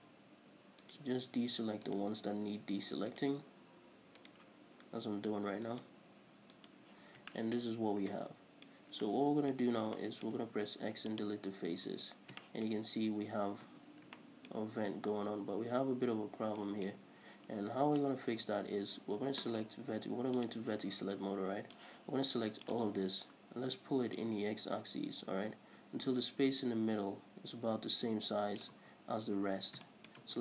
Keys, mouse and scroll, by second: 0.1 alt+shift+right click, 1.1 alt+shift+right click, 2.1 alt+shift+right click, 3.4 alt+shift+right click, 4.4 alt+shift+right click, 6.0 alt+shift+right click, 6.8 alt+shift+right click, 7.3 scroll down 1, 7.6-20.7 shift+middle drag, 8.0 scroll up 1, 10.8 x, 12.1 Tab, 12.3 scroll down 1, 13.5-13.9 scroll up 1, 13.9 Tab, 14.9 scroll up 1, 16.6 scroll down 1, 17.5-18.1 scroll up 1, 19.3-20.7 scroll down 1, 20.7 click, 21.3-21.6 scroll up 1, 22.0 click, 23.2 scroll up 1, 24.4-30.1 drag, 29.3-30.1 scroll down 2, 30.1-30.4 shift+middle drag.